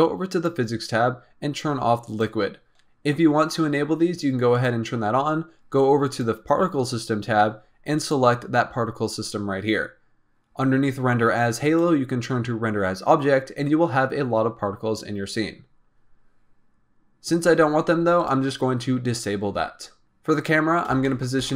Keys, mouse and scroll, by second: 0.2 click, 2.3 click, 4.8 click, 6.0 click, 8.3 click, 11.5-14.6 drag, 18.1 click, 19.4 click, 20.0-20.8 scroll up 4, 20.9 shift+middle click.